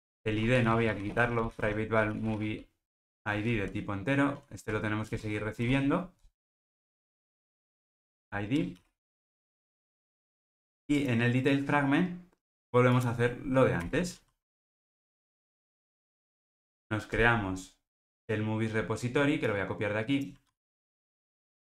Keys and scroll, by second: 5.1 Return, 9.7 alt+super+l, 10.6 ctrl+alt+o, 20.5 super+c.